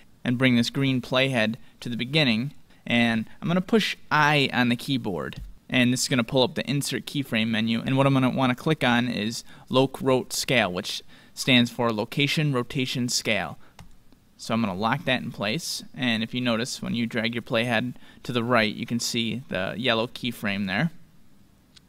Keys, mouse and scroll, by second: 15.7-17.4 drag.